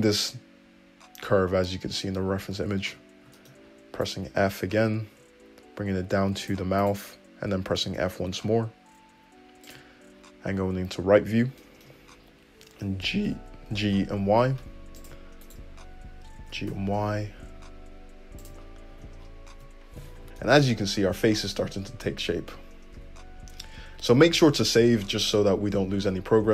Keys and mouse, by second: 2.8 `, 3.4 middle click, 3.6 click, 4.0 click, 4.6 f, 6.8 click, 7.5 f, 8.6-12.4 shift+drag, 10.5 `, 13.2 g, 15.4 click, 16.5 g, 17.1-20.1 shift+middle drag, 18.9 `, 19.5 Tab, 20.2 alt+z, 20.3 `, 23.0 `, 26.0 middle click.